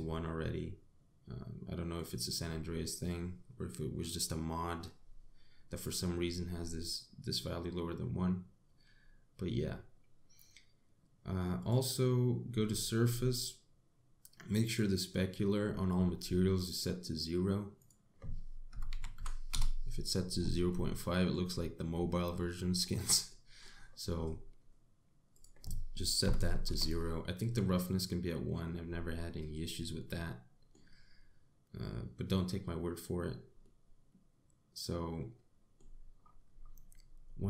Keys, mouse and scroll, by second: 0.0 click, 2.6 click, 6.4 click, 12.2 click, 13.3-14.0 scroll down 9, 16.2-16.8 scroll up 4, 16.8-18.4 scroll down 4, 18.4 click, 21.3 middle click, 22.1 scroll up 4, 22.6 scroll down 3, 23.0 middle click, 23.9 middle click, 26.0 click, 30.6 middle click, 34.2 middle click, 36.8-37.4 scroll up 10.